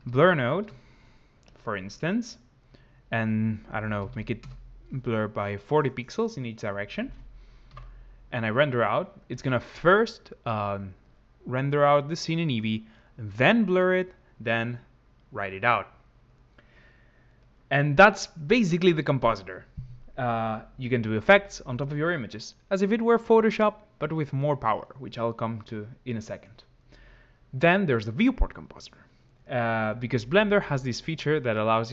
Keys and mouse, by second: 2.5-4.3 drag, 10.1 F12.